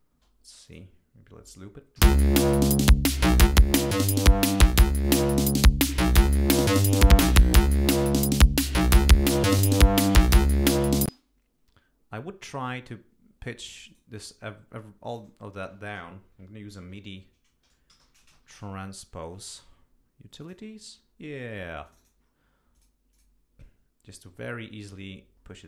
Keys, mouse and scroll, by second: 0.1 space, 0.7 click, 2.0 l, 3.4 click, 4.0 click, 4.9 click, 5.7 click, 7.6-8.9 drag, 10.4 click, 11.2 space, 13.9 right click, 15.1 click, 16.9-19.1 typing, 20.4 click, 21.8 click, 22.7 click, 23.1-24.4 drag, 25.4 scroll down 2.